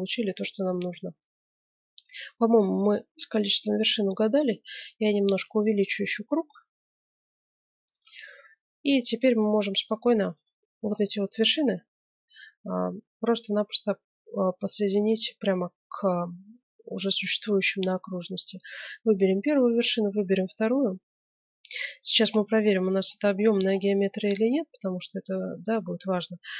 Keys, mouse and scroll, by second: 3.4 s, 8.4-9.7 middle drag, 9.7-12.3 right drag, 12.1 middle click, 19.5-21.2 right drag, 21.5-22.5 middle drag, 21.5-21.9 scroll up 1, 22.8 middle click, 23.5-26.5 middle drag.